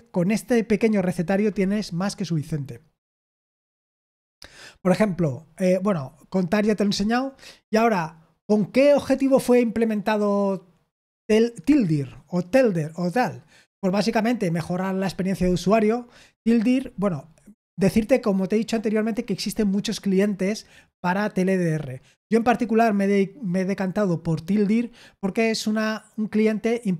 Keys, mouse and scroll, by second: 2.5-4.5 scroll down 1, 4.5-5.4 scroll down 1, 5.4-6.0 scroll down 1, 6.0-12.3 scroll down 1, 12.3-14.5 scroll down 1, 14.5-15.0 scroll down 1, 15.0-16.2 scroll down 1, 16.2-22.7 scroll down 1.